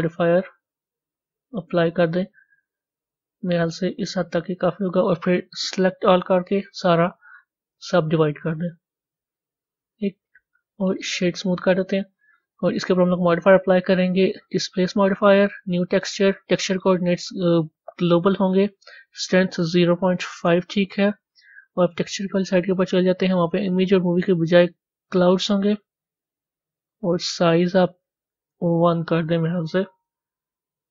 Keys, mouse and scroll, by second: 7.3-9.6 right drag, 9.6 Tab, 12.8 click, 13.6-15.7 drag, 15.9-21.8 drag, 22.2 click, 23.7-25.8 drag, 25.8 scroll down 1, 27.1-29.9 drag, 29.9-30.9 middle drag.